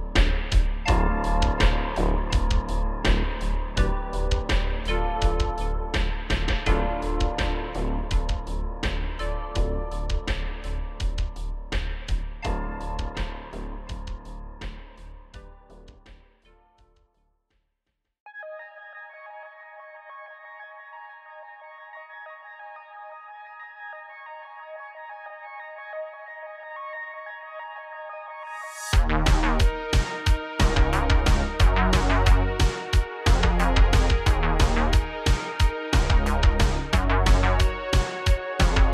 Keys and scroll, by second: 1.7-3.4 typing, 4.8 space, 8.2 space, 9.6 typing, 12.0 space, 14.1 h, 15.6 space, 16.6 space, 18.8 shift+space, 19.2 \, 19.5 super+z.